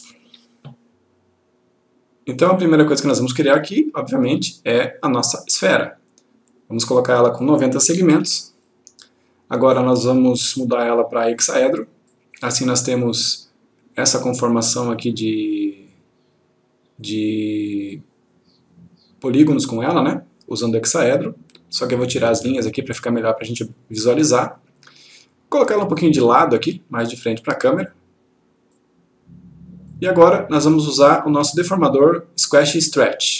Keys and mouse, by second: 4.4-6.0 click, 8.2 typing, 8.7 click, 10.9 click, 18.0 click, 22.3 click, 25.7-27.2 click.